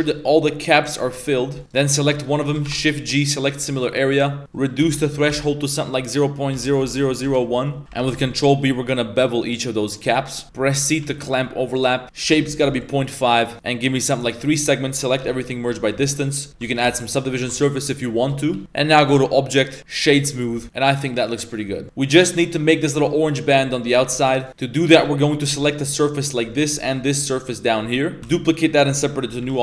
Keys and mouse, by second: 0.1-0.5 middle drag, 0.6 middle click, 1.6 middle click, 1.6 right click, 1.9 middle click, 2.2 middle click, 2.6 shift+g, 4.4-7.2 drag, 6.8 0, 7.8 z, 8.0 ctrl+b, 12.0 click, 14.4 a, 15.2 m, 15.9 Tab, 18.0 ctrl+1, 18.5 a, 18.6 a, 19.0-20.2 drag, 20.5 a, 20.7-21.5 middle drag, 24.0 Tab, 24.1-24.8 middle drag, 24.5 3, 25.3 ctrl+right click, 25.6 z, 26.0-26.3 middle drag, 26.7 z, 26.8 shift+right click, 27.0 middle click, 28.3 shift+d, 29.4 p.